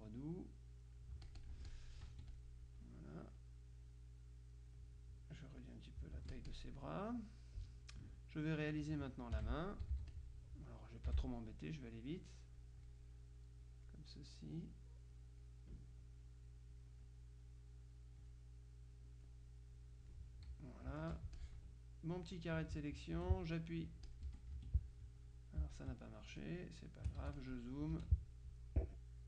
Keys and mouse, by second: 1.6 F1, 1.6-3.0 drag, 4.0-5.3 drag, 5.4-7.1 drag, 6.2 F1, 9.4 F6, 10.0 z, 10.2 click, 11.2 F6, 12.6 click, 13.7 click, 15.2 click, 16.3 click, 18.0 click, 21.1 F1, 21.4-23.3 drag, 23.2 F2, 24.1 click, 24.3 F1, 24.6 F2, 25.3 click, 26.5 click, 27.3 z, 27.5 click, 28.0 F2.